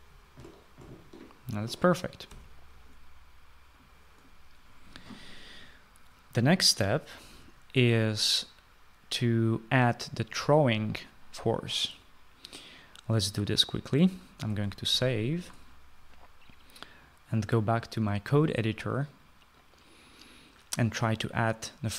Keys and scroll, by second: 1.4 s, 2.8 Escape, 15.5 ctrl+s.